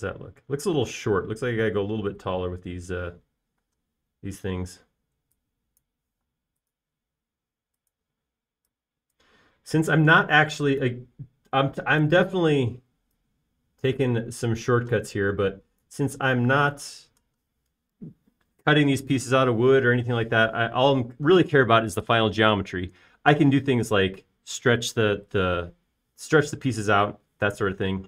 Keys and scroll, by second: 0.3 space, 5.0 space, 7.5 m, 9.6 space, 13.7 s, 18.0 space.